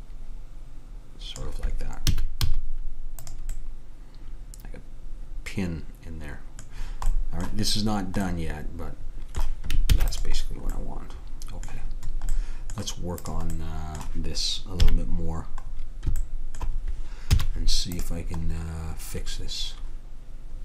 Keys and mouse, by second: 2.2 a, 2.5 z, 3.6 middle click, 4.4 middle click, 5.4 middle click, 7.2-9.1 middle drag, 10.0 ctrl+s, 13.3-14.8 drag, 14.8 KP_3, 17.4 z.